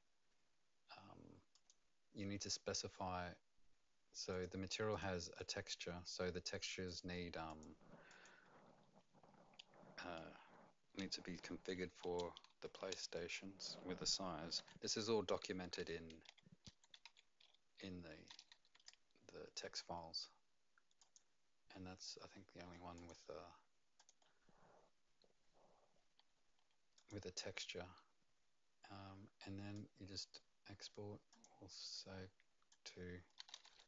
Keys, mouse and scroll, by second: 1.5 click, 4.3 click, 5.3 click, 6.8 click, 7.5 click, 8.1 click, 12.1 space, 12.5 shift+`, 14.6-18.3 typing, 18.7 KP_Enter, 21.0 click, 22.9 2, 23.9 3, 29.7 click, 31.3 click, 32.7 click, 33.1-33.8 typing.